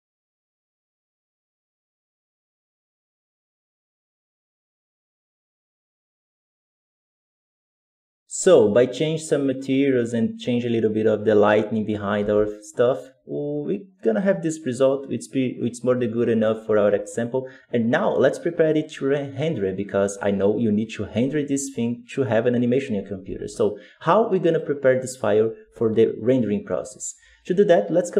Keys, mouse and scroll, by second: 0.2 click, 0.7 click, 1.7 BackSpace, 1.9 ctrl+v, 2.0 click, 2.6 BackSpace, 2.7 click, 3.4 alt+a, 3.9-5.2 drag, 5.3 scroll down 4, 5.4 right click, 5.5 KP_0, 5.9 ctrl+z, 6.1 click, 7.3 click, 7.4 KP_0, 8.1-12.0 right drag, 12.0 alt+a, 24.5 z.